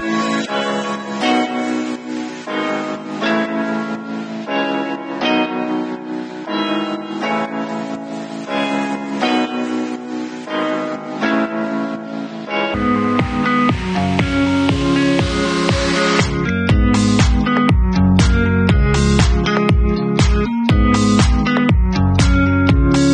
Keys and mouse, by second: 0.7 Tab, 1.0-1.5 middle drag, 1.5-3.5 drag, 3.5-4.0 middle drag, 4.0-6.6 alt+drag, 6.6 middle click, 7.0-7.9 drag, 7.9 alt+middle drag, 8.2-15.6 alt+drag, 15.6-17.4 middle drag, 16.0 Tab, 16.8 3, 17.4-20.1 drag, 20.1 middle click, 20.6 click, 21.3 alt+middle click, 21.5 middle click, 21.6 click, 21.6 Tab, 22.1-22.4 alt+middle drag, 22.4-23.1 alt+drag.